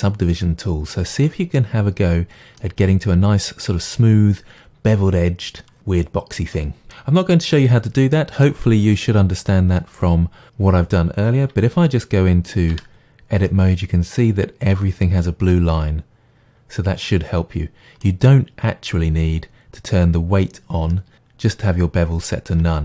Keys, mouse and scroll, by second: 12.8 Tab.